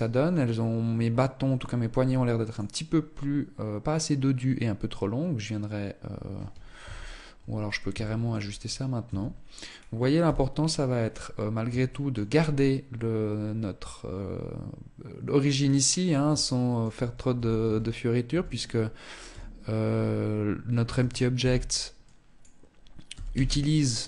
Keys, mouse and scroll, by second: 6.1 KP_1, 7.5 shift+middle click, 7.7-8.5 scroll up 3, 8.5 Tab, 9.1 scroll up 1, 9.5 z, 9.7-10.9 scroll up 3, 10.9 shift+middle click, 14.8 scroll down 4, 15.3 shift+middle click, 16.3 a, 16.9 a, 17.6 a, 18.6 t, 20.3 t, 20.7 b, 22.4 g.